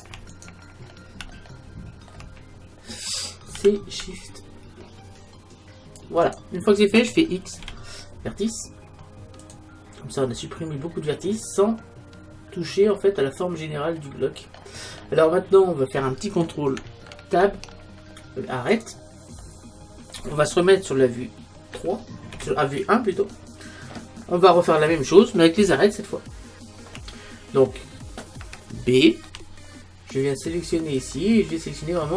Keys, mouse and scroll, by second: 0.5 right click, 1.4-3.2 middle drag, 3.6 c, 7.6 x, 10.3-13.2 middle drag, 14.6-15.1 scroll up 1, 15.1-16.4 scroll up 1, 16.4 scroll up 1, 16.5 middle click, 17.4 ctrl+Tab, 19.4-21.4 middle drag, 21.7 KP_3, 22.3 KP_1, 29.3 b.